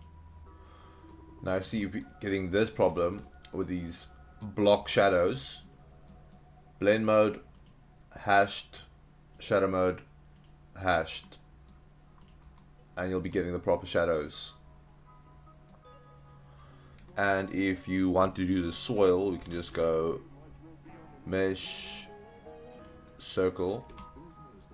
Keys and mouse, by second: 1.1-1.6 middle drag, 2.0-2.3 middle drag, 3.0 shift+middle click, 3.3 middle drag, 3.9-4.4 middle drag, 5.3-5.7 middle drag, 6.1 middle drag, 7.6-8.5 drag, 9.5-10.5 drag, 11.2-11.7 middle drag, 12.6-13.0 middle drag, 13.3-13.7 middle drag, 14.3-15.7 middle drag, 17.1-17.6 middle drag, 18.3-18.7 shift+middle drag, 19.1 middle drag, 19.5 shift+a, 23.9 s.